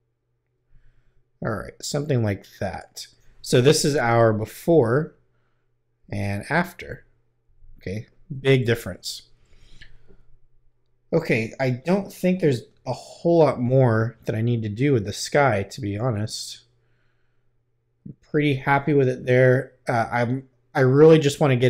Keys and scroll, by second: 4.6 \, 6.0 \, 8.6 \.